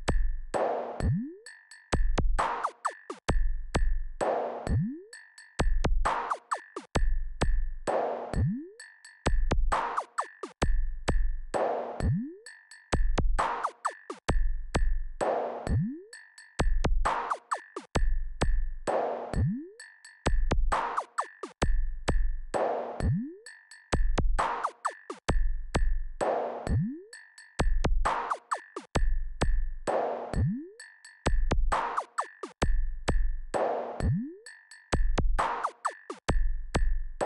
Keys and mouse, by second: 2.8 KP_1, 5.3-8.5 drag, 9.1-15.2 drag, 16.7 KP_4, 16.9 KP_4, 20.4-21.0 ctrl+KP_6, 21.3-22.9 typing, 32.9 shift+d.